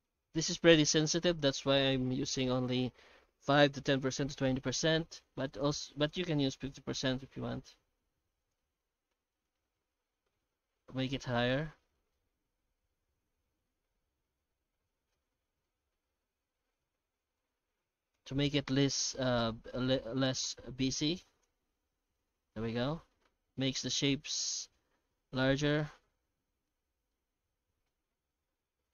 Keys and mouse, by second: 0.2 F9, 13.6-15.1 middle drag, 15.6-17.4 middle drag, 18.1 F9, 23.6-26.7 middle drag, 27.1-28.9 middle drag.